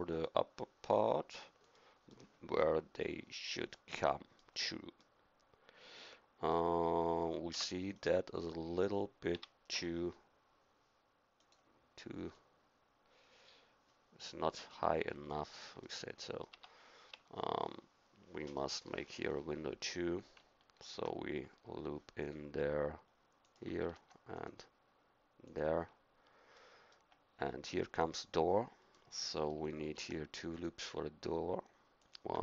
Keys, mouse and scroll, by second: 2.1-3.7 middle drag, 7.5 Tab, 9.3 s, 12.3-15.2 drag, 15.8-18.5 drag, 16.5 Tab, 20.8 ctrl+r, 23.8 ctrl+r, 26.6 middle click, 29.8 ctrl+r.